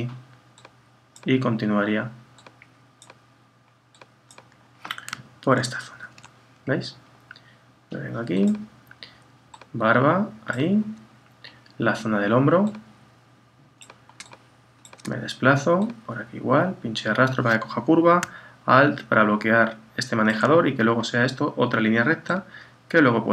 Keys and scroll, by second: 5.6 super+-.